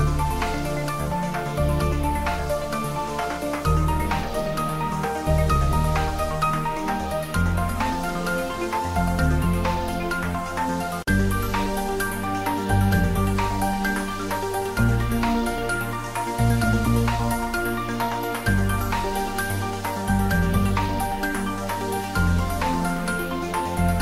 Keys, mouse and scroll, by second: 3.5 click, 6.4 ctrl+s, 8.0 middle click, 8.4 ctrl+middle click, 8.9-11.3 drag, 11.3-12.6 middle drag, 13.2 click, 14.3-15.6 middle drag, 15.6 ctrl+s, 16.7 ctrl+middle click, 17.1-18.4 typing, 18.8 click, 19.1-20.7 ctrl+middle drag, 20.7 click, 21.3-22.3 typing.